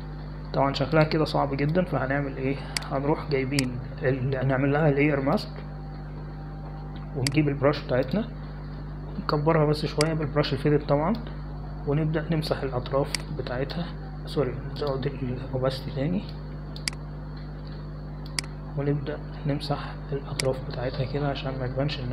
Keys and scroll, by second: 11.6-12.2 typing.